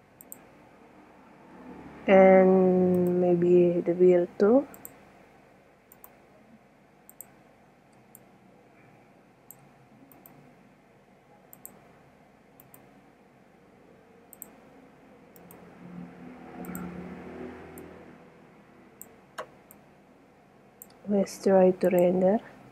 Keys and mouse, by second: 0.4 click, 2.0 click, 2.1-2.6 middle drag, 3.5 right drag, 5.1 click, 6.0 right click, 8.1-8.6 middle drag, 8.7-9.4 middle drag, 10.5 right drag, 12.0 right click, 12.7-13.0 right drag, 14.5 click, 15.5 middle click, 16.4 click, 16.8 click, 17.6 click, 18.1 middle click, 19.7-20.9 middle drag, 21.6 middle click, 22.1 click.